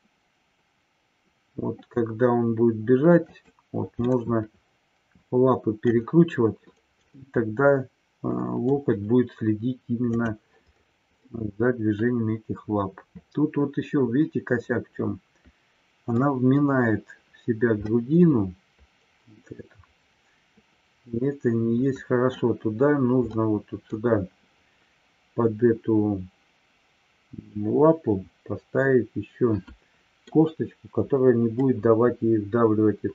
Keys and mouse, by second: 4.0-5.9 middle drag, 7.1-8.6 middle drag, 11.1-16.2 middle drag, 17.9-22.2 middle drag, 23.2-24.0 middle drag, 27.6-30.2 middle drag, 31.6-33.1 middle drag.